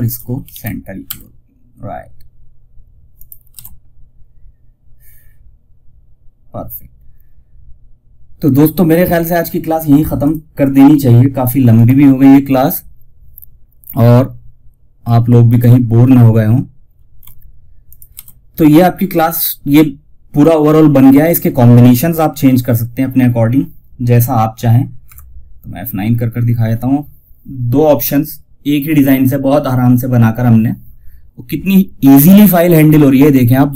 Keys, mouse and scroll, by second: 0.0-0.3 typing, 2.4 click, 2.8 shift+F2, 7.8 click, 14.8 click, 17.2 shift+click, 17.4 shift+F2, 24.4 F9.